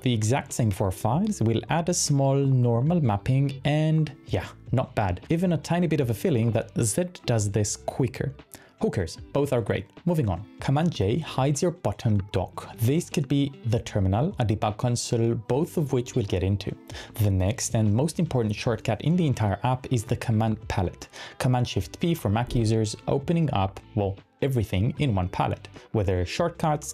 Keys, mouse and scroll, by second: 0.0-0.7 typing, 1.3 Up, 1.7 Up, 2.1-3.0 typing, 3.1 Return, 4.1-4.5 typing, 8.1 super+Tab, 11.0 super+j, 12.2 super+j, 13.4 super+j, 16.2 super+Tab, 17.1-17.8 typing, 20.7 shift+super+p, 22.0-22.8 typing.